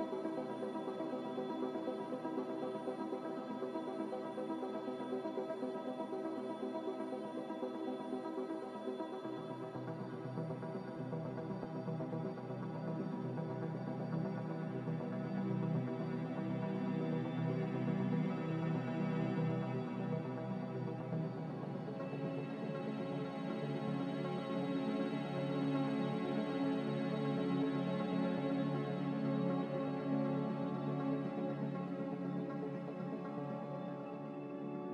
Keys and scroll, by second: 0.9 z, 6.0-7.7 typing, 11.8 z, 17.9 z, 21.0-22.7 typing, 26.0 z, 27.2 5, 27.4-31.5 Return, 33.5 a.